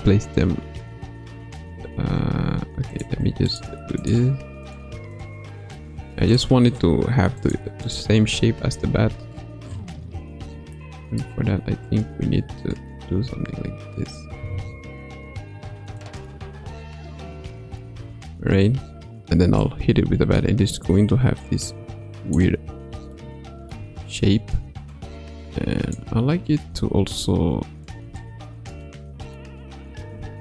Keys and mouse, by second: 3.5 shift+click, 4.0 shift+click, 4.7-5.9 shift+drag, 6.3 shift+click, 7.9 shift+click, 8.8 g, 16.3-17.8 middle drag, 17.9 Tab, 19.6-22.5 drag, 23.1-23.8 middle drag, 23.8 Tab, 25.1 click, 27.9 shift+click, 28.9 middle click.